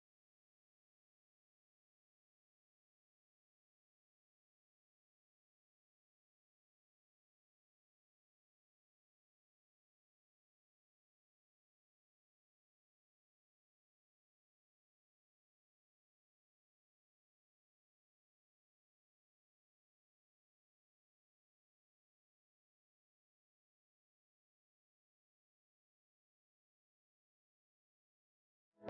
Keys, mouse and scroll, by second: 0.4 p, 0.5 Return, 1.5-1.9 scroll up 1, 3.7 scroll down 1, 4.9 scroll up 1, 5.5 scroll down 1, 6.7 scroll down 1, 7.6 click, 8.0 right click, 8.2 scroll down 1, 8.5 right click, 9.2 scroll up 1, 10.1 scroll down 1, 10.3-10.6 scroll up 1, 10.6 scroll down 1, 11.1 click, 12.1 typing, 12.6 Return, 14.0 scroll down 1, 14.1 scroll up 1, 14.3-15.8 right drag, 15.9-16.5 scroll down 1, 17.4-18.3 typing, 18.4 click, 18.5 scroll down 1, 18.6 scroll up 1, 18.9-19.9 scroll down 1, 19.9 scroll up 1, 20.3 right click, 20.4 click, 20.8 scroll down 1, 21.0 scroll up 1, 21.3 click, 21.4 right click, 22.1 scroll up 1, 22.3 click, 24.0-24.4 scroll down 1, 24.4 right click, 24.7-25.2 scroll down 1, 25.2 scroll up 1, 25.4 click, 25.5 scroll down 1, 25.6-26.1 scroll up 1, 26.3-27.2 typing, 27.1 scroll up 1, 27.4 right click, 27.8 click, 28.0-28.3 scroll up 1, 28.7 click.